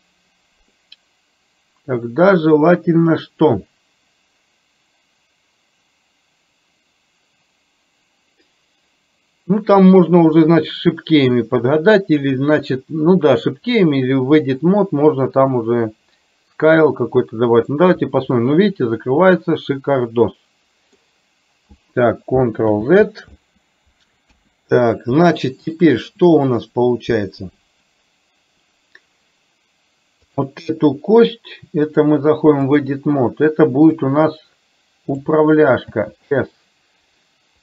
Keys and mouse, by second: 16.9-17.8 middle drag, 18.3-21.2 middle drag, 22.8 ctrl+z, 24.4 KP_1, 25.5 shift+middle click, 30.4 click, 32.0-32.9 drag, 34.2-35.3 drag.